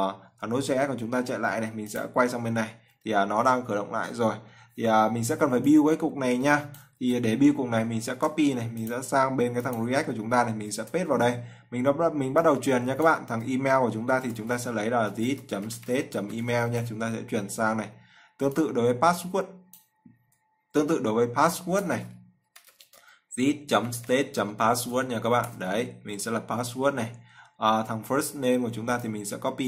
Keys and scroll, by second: 8.2 ctrl+c, 11.6 ctrl+v.